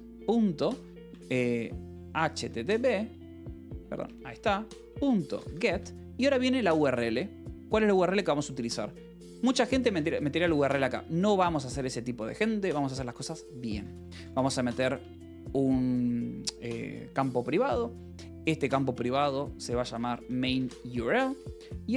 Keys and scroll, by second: 0.0-6.2 typing, 9.5-11.7 typing, 13.2-15.3 typing, 19.7-21.5 typing.